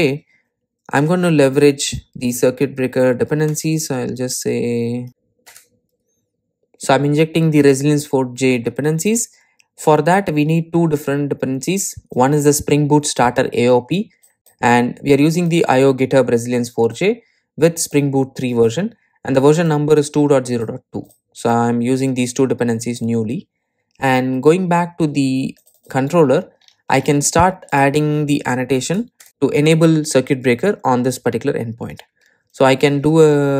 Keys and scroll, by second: 5.1 super+j, 6.1 Return.